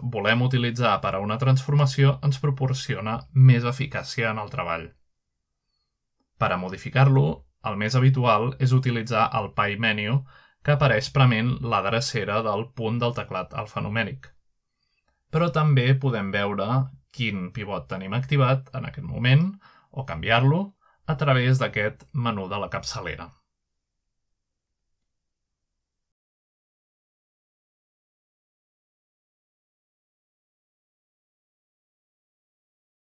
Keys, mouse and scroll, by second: 0.9-1.6 middle drag, 3.1 r, 6.1-7.1 right drag, 7.6 click, 12.5 ▪, 16.5 click, 17.7 r, 18.9 right drag, 20.0 click, 22.7 click, 27.4 click, 27.9 typing, 30.0 right click, 30.4 s, 32.6 click.